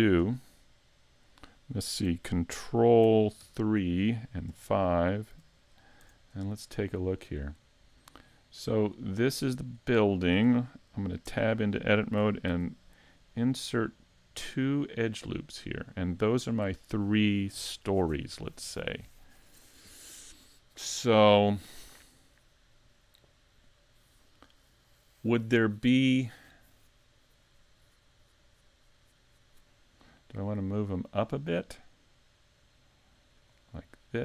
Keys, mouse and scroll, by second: 0.2 KP_3, 3.6 ctrl+KP_3, 4.5 KP_5, 5.3 z, 5.7-6.6 scroll up 5, 6.0 a, 6.8 shift+middle click, 7.4-7.8 scroll down 2, 8.8 right click, 10.0 shift+middle click, 11.3 Tab, 12.5 ctrl+r.